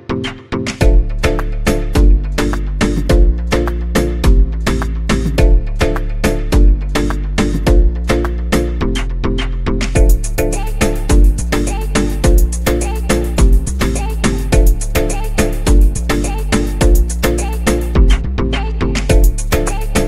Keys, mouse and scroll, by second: 12.3 scroll down 2, 13.0 click, 15.0 click, 16.9-17.7 scroll down 3, 19.0 click.